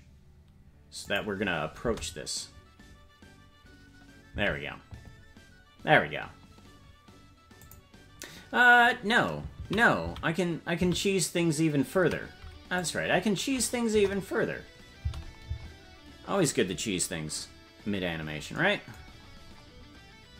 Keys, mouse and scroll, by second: 2.2 space, 4.4 space, 7.6 click, 10.1 ctrl+2, 10.7 ctrl+2, 12.0 ctrl+z, 12.8 click, 13.9 KP_0, 15.0 space, 15.5 space, 18.2-20.0 scroll down 4.